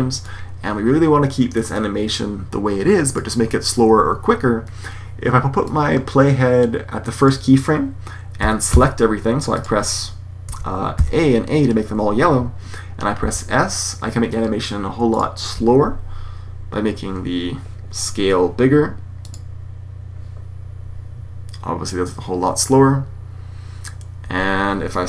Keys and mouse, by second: 0.2-1.5 drag, 5.5-5.8 drag, 8.3 s, 13.2 a, 19.1 click, 20.2 click, 24.2 Escape.